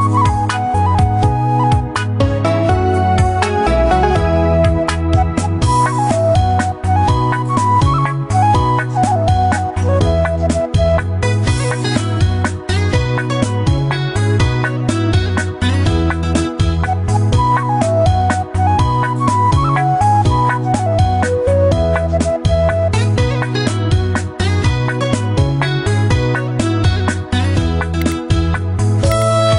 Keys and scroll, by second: 8.8 ctrl+t, 19.3 ctrl+t.